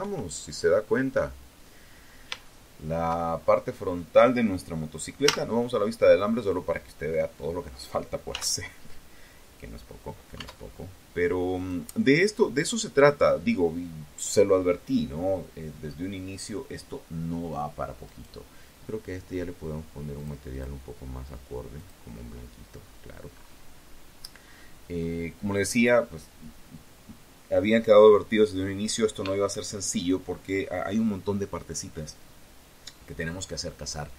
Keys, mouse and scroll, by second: 0.6 shift+middle click, 1.4-1.8 shift+scroll up 3, 1.8-2.2 scroll down 2, 3.4 z, 6.5 z, 8.6 Tab, 9.7 click, 11.1 click, 16.2 right click, 18.3 click, 18.6 click, 19.9 click, 20.9-21.2 scroll down 1, 21.5-22.2 scroll up 1, 22.2 scroll down 1, 22.6-22.9 scroll up 1, 23.1 scroll down 2.